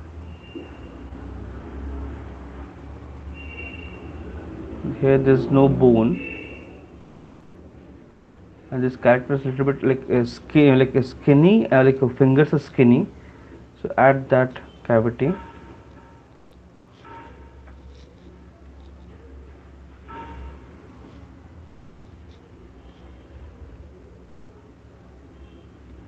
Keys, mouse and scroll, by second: 2.3 alt+click, 3.9 click, 4.7 click, 5.8 alt+click, 6.4 alt+click, 6.4 right click, 8.1 right click, 8.1 click, 8.5 click, 8.9 click, 9.3 click, 9.5 click, 9.9 click, 12.1 right click, 12.1 click, 13.6 click, 13.6 right click, 14.1 click, 14.5 click, 14.7 click, 15.1 click, 15.5 click, 16.8 click, 17.4 middle click, 17.6 alt+click, 19.2 click, 19.7 click, 20.1 click, 20.5 click, 20.7 alt+click, 20.9 click, 21.3 click, 22.1 alt+click, 23.8 alt+click, 24.2 click.